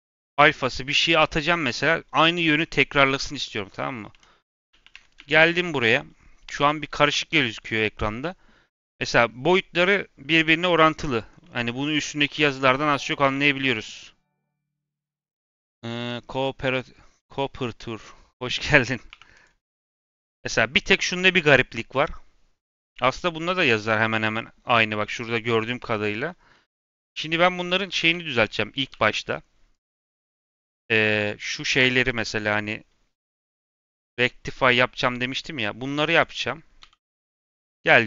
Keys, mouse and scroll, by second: 3.3 click, 4.0 Tab, 4.4 Tab, 4.6 a, 4.9 Tab, 5.1 a, 5.3-5.8 scroll down 2, 5.8 a, 6.3-6.9 scroll down 2, 6.9 n, 7.2 n, 7.7-8.4 scroll down 1, 11.2 scroll up 2, 11.4-12.5 middle drag, 12.5-12.8 scroll up 2, 12.8-18.6 middle drag, 18.6 Tab, 19.0 3, 19.3 click, 19.7 Tab, 20.0 a, 22.6-25.7 scroll up 2, 26.6 n, 26.9 Tab, 27.3 scroll down 1, 27.6 a, 27.8 Tab, 28.0 a, 28.3 scroll down 1, 28.8 g, 29.9 middle click, 30.8 click, 31.1 middle click, 31.3-31.8 scroll up 2, 31.8 3, 32.0 click, 33.1 l, 33.6 n, 34.5-34.9 drag, 34.9-36.0 middle drag, 36.0 click, 36.8 l, 37.8-38.0 drag.